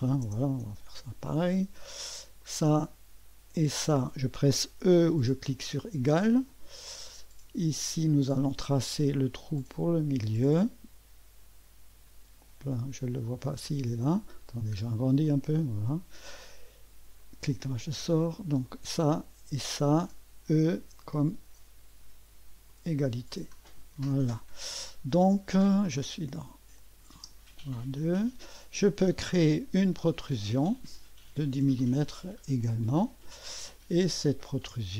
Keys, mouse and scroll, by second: 0.0 shift+0, 0.6 Return, 2.4 click, 3.6 click, 4.2 typing, 5.9 typing, 8.8 click, 9.1-9.8 typing, 10.5 click, 13.4 click, 14.2-15.3 scroll up 1, 15.3 middle click, 15.7-18.2 drag, 15.7 typing, 18.7-20.1 drag, 20.8 typing, 22.7 click, 23.1 click, 23.3-24.0 typing, 26.8 click, 27.2 space, 29.3 click, 29.7 click, 30.7 click, 32.8 click, 33.7 click.